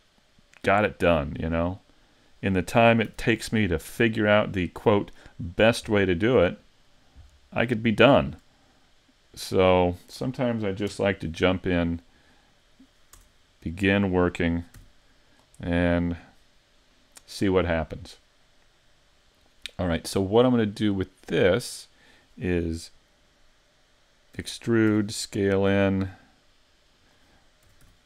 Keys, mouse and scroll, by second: 2.4 click, 3.1 z, 3.4 middle click, 5.8 scroll up 2, 6.2 middle click, 7.9 shift+middle click, 9.3 click, 10.9 KP_Decimal, 12.3 middle click, 13.2 Tab, 13.7 right click, 14.8 x, 15.7 middle click, 19.4 right click, 21.2 middle click, 24.4 e, 24.9 s, 27.1 click, 27.7 s.